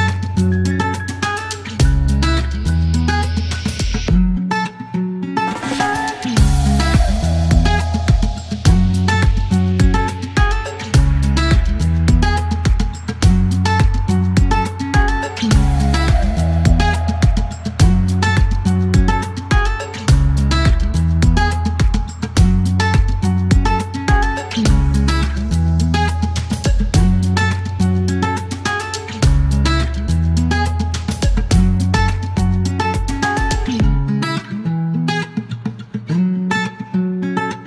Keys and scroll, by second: 1.8 typing, 4.0 typing, 5.3 q, 5.8 KP_9, 7.8 alt+e, 13.0 alt+q, 13.2 typing, 19.9 alt+q, 21.2 alt+u, 21.4 typing, 21.7 Delete, 25.6-26.8 typing, 28.5 typing, 29.4 alt+e, 32.1 shift+h, 37.0-37.6 typing.